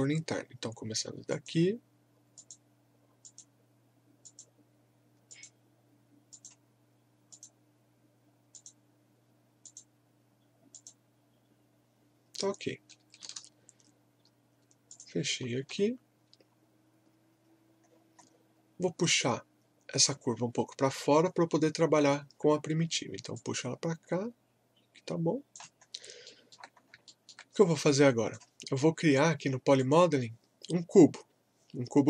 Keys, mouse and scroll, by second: 1.3 click, 14.9 click, 15.1-16.2 typing, 16.5 scroll down 1, 17.3-18.2 scroll up 1, 18.8-20.5 scroll down 1, 23.3-25.9 drag, 25.8 scroll up 1, 26.3 alt+middle click, 26.7 scroll up 1, 27.0 alt+middle click, 27.8-29.8 drag.